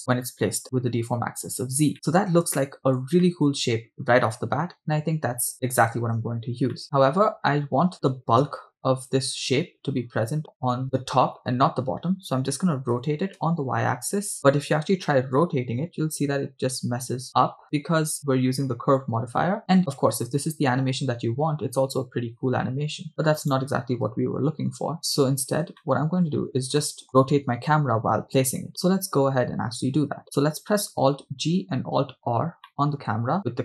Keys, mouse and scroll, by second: 0.2 scroll down 3, 0.5-1.2 scroll up 2, 1.9 shift+middle click, 2.0-2.5 scroll down 2, 2.6-3.0 shift+middle drag, 3.2-5.2 middle drag, 5.2 scroll up 3, 5.5-6.0 shift+middle drag, 6.4-6.8 scroll down 2, 7.1 middle click, 10.8 middle drag, 12.1-12.5 scroll down 1, 13.4 r, 13.5 y, 15.1 r, 15.4 y, 23.4 right click, 24.4 r, 24.4 x, 25.9-26.2 shift+middle drag, 26.4 scroll up 2, 26.9 middle click, 27.1 right click, 31.2 alt+g, 32.0 alt+g, 32.7-33.4 middle drag.